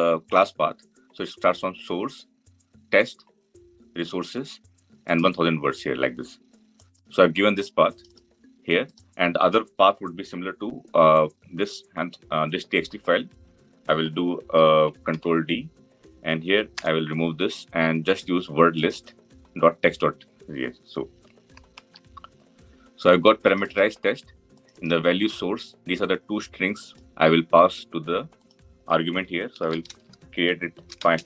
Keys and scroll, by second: 14.9 ctrl+d.